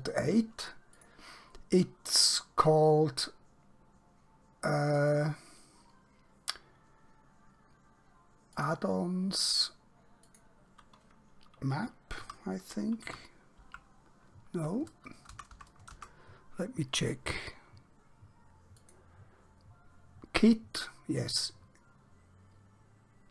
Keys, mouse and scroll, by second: 1.0 click, 5.1 click, 8.7 click, 12.2 m, 15.4 BackSpace, 18.8 click.